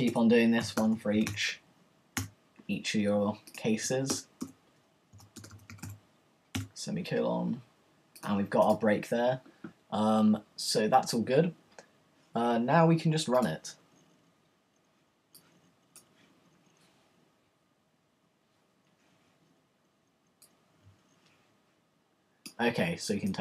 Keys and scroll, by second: 0.4-2.6 typing, 4.1 Return, 4.9-6.9 typing.